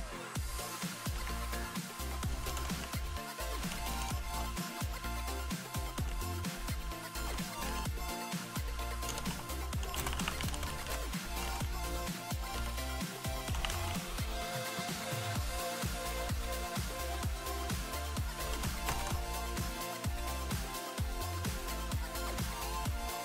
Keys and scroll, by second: 0.0-19.6 typing.